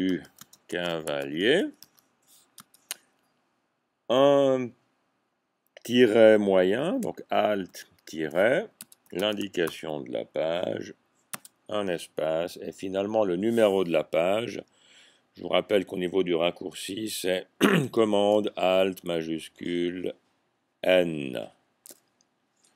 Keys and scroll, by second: 0.0-2.7 typing, 7.7 alt+-, 9.1-9.7 typing, 13.0-13.8 typing, 21.1 n.